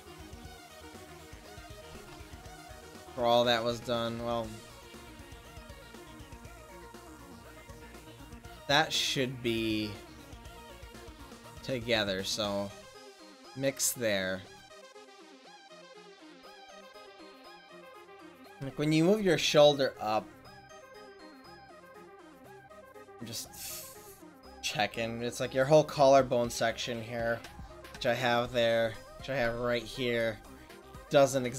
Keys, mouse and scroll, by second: 2.0 ctrl+alt+shift+z, 4.5 ctrl+alt+shift+z, 4.5-6.9 drag, 6.9 ctrl+z, 12.5-14.7 drag, 16.0 ctrl+z.